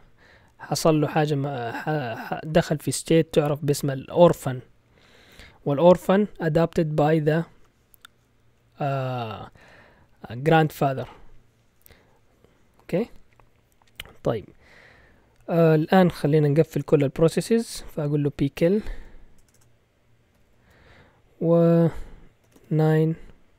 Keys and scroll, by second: 18.2-20.6 typing, 22.2-23.5 typing.